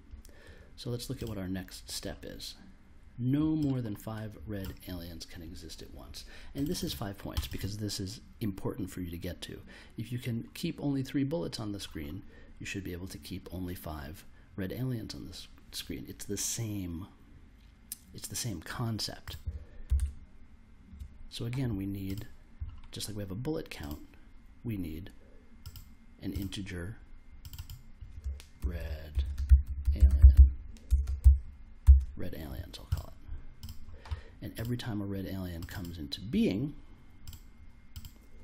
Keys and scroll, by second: 19.9 super+Tab, 28.3-31.8 typing.